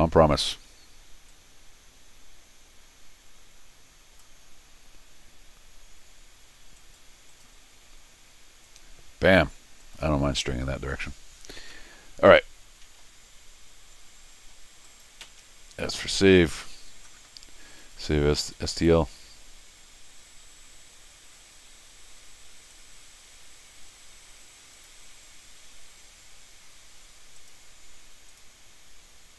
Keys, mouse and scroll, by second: 1.3-4.2 drag, 6.8 click, 7.3 click, 8.6 click, 9.8 click, 10.3 middle click, 10.8 middle click, 11.6 middle click, 12.4 middle click, 14.9 click, 15.2 s, 17.7 click, 18.5-19.5 typing, 22.7 click, 24.7 click, 27.4 click, 28.3 click.